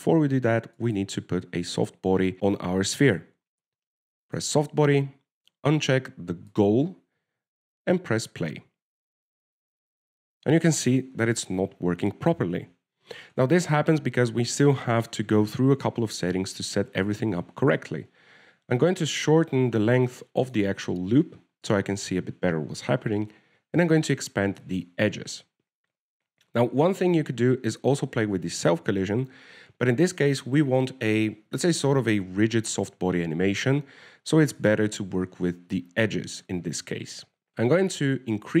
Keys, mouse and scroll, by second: 0.8 shift+middle click, 2.2 right click, 5.6 click, 7.8 click, 9.8 alt+a, 12.0 middle click, 12.6 shift+middle click, 13.0 scroll up 1, 13.1 scroll down 1, 14.7-15.0 scroll up 2, 19.2 click, 27.6-28.9 scroll down 4.